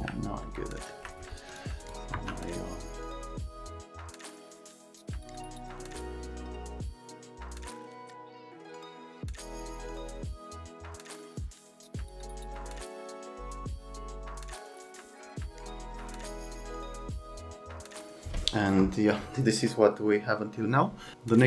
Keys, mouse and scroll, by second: 0.4 alt+middle click, 1.5 click, 1.8 middle click, 2.1 F3, 4.2 alt+middle click, 4.6 scroll down 1, 5.0 F3, 5.2 middle click, 5.5 alt+scroll down 1, 6.3 click, 6.4 F3, 6.5 click, 6.8 F3, 7.5 click, 8.0 middle click, 8.0 alt+middle click, 8.2 middle click, 9.0 click, 9.7 click, 9.9 alt+middle click, 10.2 click, 10.3 middle click, 10.5 scroll down 1, 10.7-11.1 ctrl+scroll up 2, 11.3 middle click, 11.6-12.2 alt+scroll, 12.4 click, 12.5 F3, 12.6 click, 12.7 right click, 13.0 click, 13.2 2, 13.3 click, 13.5 shift+click, 13.9 click, 14.2 click, 14.3 click, 14.7 click, 15.8 scroll down 1, 15.9 F3, 16.0 alt+middle click, 16.2 x, 16.4 click, 16.4 right click, 16.6 click, 17.0 ctrl+s.